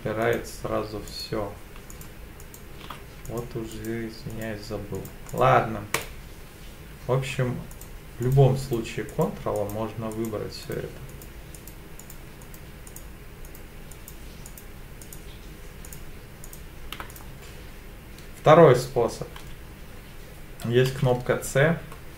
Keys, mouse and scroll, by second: 0.2 click, 1.1 alt+shift+click, 1.9 alt+shift+click, 2.4 alt+shift+click, 3.2 click, 3.7 click, 4.3 click, 4.9 click, 5.3 click, 5.9 click, 7.7 shift+click, 8.2 shift+click, 8.6 shift+click, 9.1 shift+click, 9.6 shift+click, 10.1 shift+click, 10.6 shift+click, 11.1 shift+click, 11.5 shift+click, 12.0 shift+click, 12.4 shift+click, 12.9 shift+click, 13.4 shift+click, 13.9 shift+click, 14.5 shift+click, 15.0 shift+click, 15.8 shift+click, 16.4 shift+click, 17.1 click, 20.9 c.